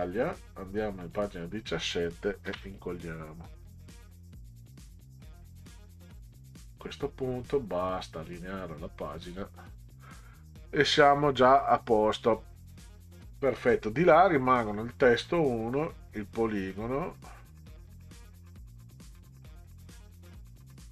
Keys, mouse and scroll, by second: 1.0 click, 2.5 ctrl+v, 4.5 middle click, 8.2 click, 9.0 click, 9.6 click, 10.1 middle click, 13.7 click, 15.7 click.